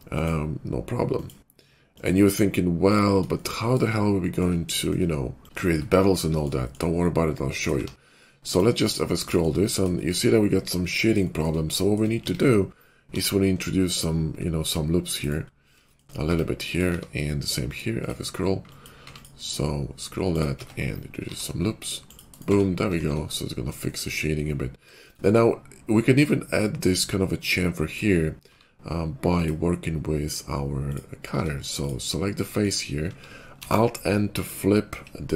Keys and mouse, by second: 2.9-8.6 middle drag, 7.7 q, 8.9-11.4 shift+middle drag, 8.9 q, 11.6-12.7 shift+middle drag, 12.2 Tab, 13.0 ctrl+r, 13.2-16.1 middle drag, 16.2 Tab, 16.9 q, 18.0 Tab, 18.0 q, 18.6 click, 18.9 q, 20.3 q, 20.5 Tab, 21.2 ctrl+r, 22.5 Tab, 23.1 shift+2, 23.5-27.8 shift+middle drag, 27.8 click, 28.4 q, 30.9 q, 31.2 Tab, 33.5 alt+n.